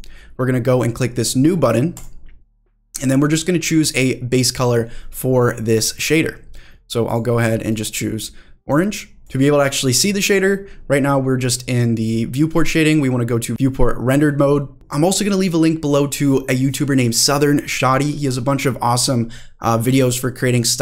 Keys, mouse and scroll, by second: 1.9 click, 5.9 click, 7.0-9.2 drag, 13.5 click, 14.5 middle drag, 14.7 click.